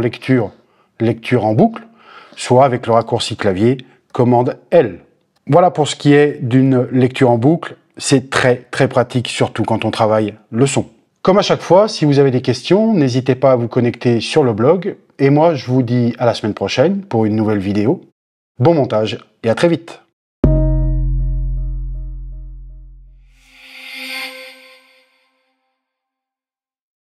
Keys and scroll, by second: 4.5 super+l.